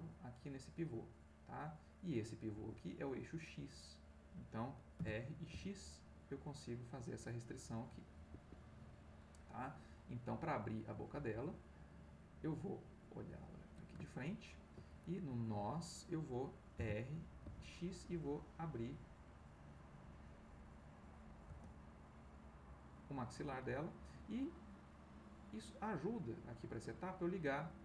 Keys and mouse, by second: 2.5 Escape, 3.5-4.6 middle drag, 5.2 r, 5.6 x, 8.3 Escape, 11.5 click, 13.3 click, 14.0-15.0 ctrl+middle drag, 16.7 r, 17.4 x, 21.5 space, 26.2 click.